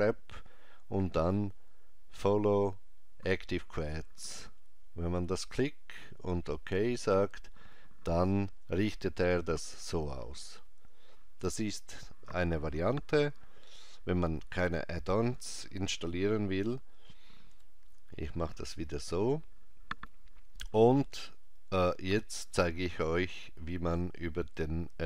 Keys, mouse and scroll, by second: 17.5 ctrl+z.